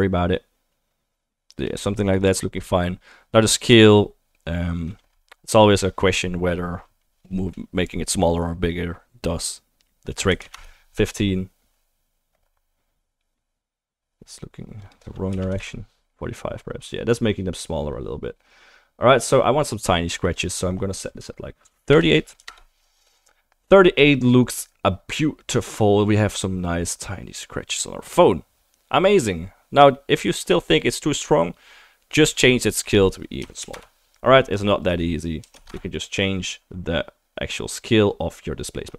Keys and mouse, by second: 3.1-12.2 drag, 3.1-12.2 right drag.